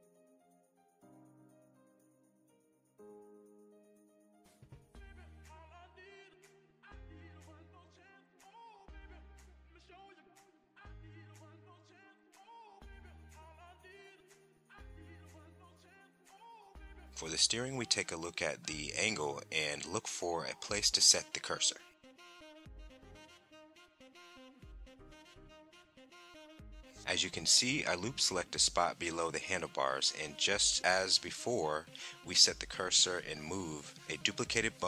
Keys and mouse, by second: 0.4 Tab, 2.1 shift+d, 2.7 click, 3.4 shift+s, 5.4 middle click, 5.9 middle click, 6.0 shift+middle click, 6.6 Tab, 6.8 click, 6.9 Tab, 7.2 click, 7.4 shift+click, 8.0 shift+s, 8.6 Tab, 8.7 click, 9.4 Tab, 9.7-10.8 typing, 9.9 click, 10.6 KP_Enter, 12.2 middle click, 12.4 click, 12.4 middle click, 14.4 Tab, 15.8 click, 16.7 click, 18.5 shift+middle click, 19.6 shift+middle click, 23.3 Tab, 24.7 click, 26.6 click, 28.5 click, 30.0 alt+click, 31.0 alt+click, 32.3 shift+s.